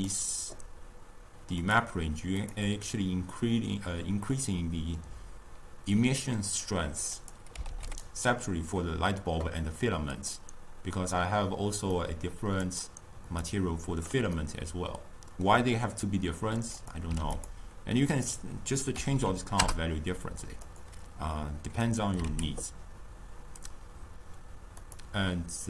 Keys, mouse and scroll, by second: 0.1 drag, 2.5 click, 8.0 click, 13.6 click, 17.5 click, 19.7 0, 22.6 click, 25.1 click.